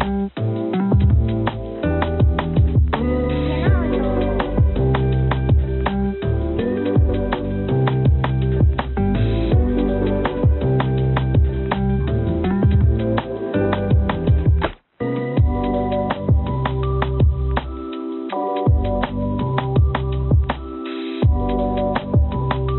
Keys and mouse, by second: 0.4 right click, 1.2-3.1 drag, 5.4-7.0 drag, 11.9 ctrl+r, 16.9 click, 18.6 ctrl+r.